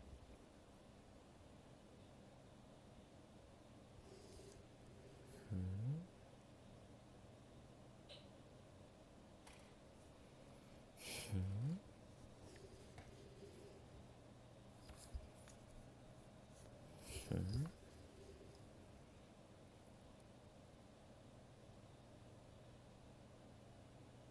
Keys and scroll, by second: 3.4 ctrl+z, 7.8 ctrl+z, 18.0 ctrl+z.